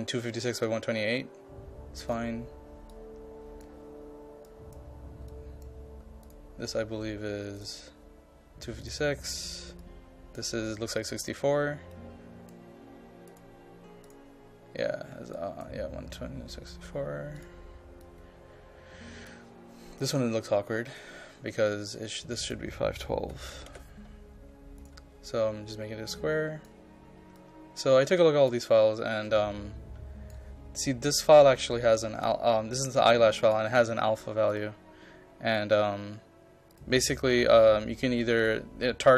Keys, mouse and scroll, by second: 23.4 KP_5, 23.6 KP_1, 23.8 KP_2, 24.8-29.3 drag, 30.3-34.3 drag.